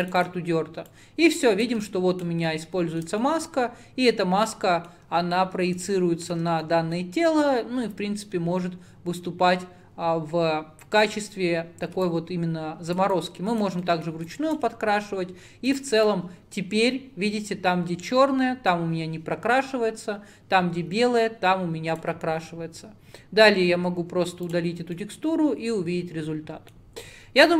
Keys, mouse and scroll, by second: 0.9-2.6 drag, 2.6 alt+middle click, 3.3-12.1 middle drag, 12.1-13.9 drag, 13.9-14.3 middle drag, 14.3-19.1 drag, 24.2-24.6 scroll down 6, 24.6 click, 25.0-27.5 middle drag.